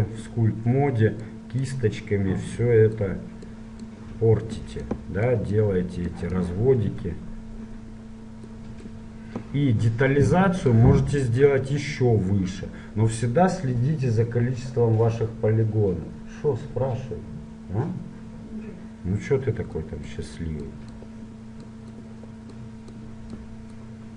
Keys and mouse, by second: 0.0 click, 1.4-8.1 drag, 8.7-10.6 drag, 10.8-12.9 drag, 19.9-24.1 drag.